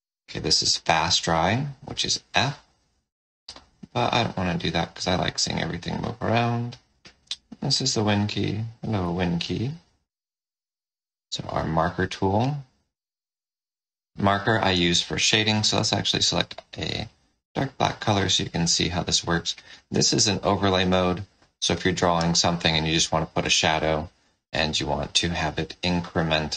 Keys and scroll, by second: 0.6 f, 4.4 ctrl+z, 11.4 shift+m, 16.0 F6, 26.4 space.